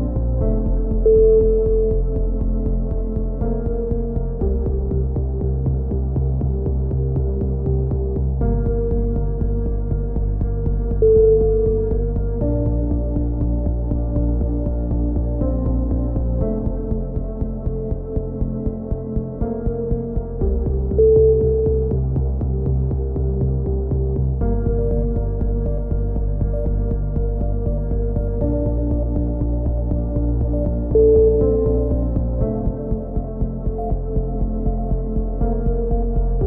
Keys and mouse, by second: 0.2 e, 1.4 a, 1.5 z, 2.2 click, 2.4 KP_6, 2.6 KP_7, 2.8 right click, 3.1-5.0 drag, 5.4 click, 6.1 ctrl+r, 6.8 click, 7.4 right click, 7.6 g, 8.7 right click, 8.7 f, 8.9 a, 9.1 click, 9.3 right click, 9.7 x, 10.1 click, 10.4 KP_3, 11.8 Tab, 11.8-13.7 drag, 12.3 Tab, 12.5-13.7 right drag, 13.7 Tab, 13.9 Tab, 14.1 a, 14.4 ctrl+r, 14.9 click, 14.9 g, 15.5-16.8 drag, 17.1 a, 17.2 click, 18.3 z, 19.1 KP_7, 19.5-20.7 right drag, 19.7-20.7 drag, 20.9 right click, 21.2-22.2 drag, 22.4 a, 23.9-25.4 right drag, 24.6 f, 24.7 a, 27.7-29.1 right drag, 29.0 f, 29.1 a, 29.4 k, 31.7 right click, 31.9 click, 32.4 a, 32.8 right click, 33.0 click, 33.9 KP_3, 34.4-35.4 drag, 35.5 click, 35.5 a, 35.7 z.